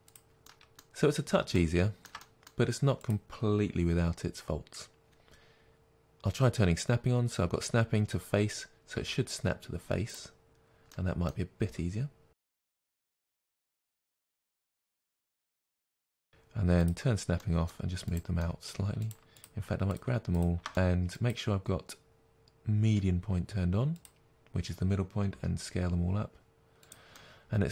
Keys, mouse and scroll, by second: 0.1 click, 0.4-3.0 middle drag, 0.9-1.5 scroll up 2, 3.0 click, 8.9 g, 10.2 click, 10.8-12.5 middle drag, 11.6 g, 12.5 click, 12.7-15.2 typing, 13.1 click, 13.2 middle click, 13.5 click, 13.8 click, 13.9 middle click, 14.4 click, 14.6 middle click, 14.7 click, 14.9 click, 15.5 click, 15.6-16.8 middle drag, 15.9 ctrl+z, 16.8 click, 17.3 middle click, 18.1 click, 18.3 middle click, 19.0 shift+click, 20.7-23.9 middle drag, 23.9-26.9 drag, 25.3 s, 27.1-27.7 middle drag.